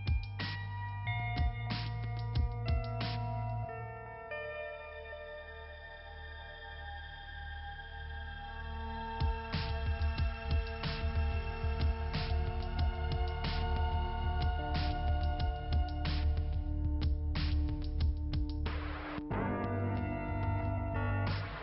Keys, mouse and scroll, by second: 1.4 click, 1.7 click, 10.1 click, 10.8 click, 11.5 scroll down 1, 12.9 click, 14.0 click, 15.6 scroll down 1, 16.5 click, 17.5 click, 18.5 click, 19.6 click, 19.7 click, 20.4 click.